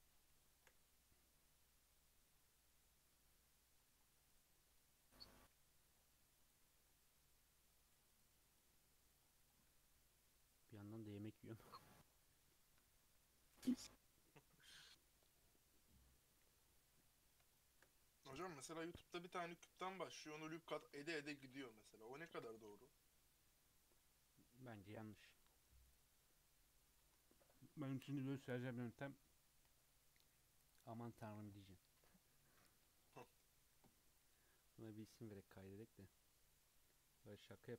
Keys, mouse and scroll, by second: 4.0 scroll down 2, 4.3 click, 4.5-5.2 middle drag, 5.2 s, 6.9-8.1 middle drag, 8.1 click, 8.3-9.1 middle drag, 9.1-10.2 scroll down 4, 16.6-16.9 scroll up 3, 16.9-20.0 middle drag, 20.0 click, 20.8 KP_Decimal, 21.1-22.4 middle drag, 22.4 ctrl+s.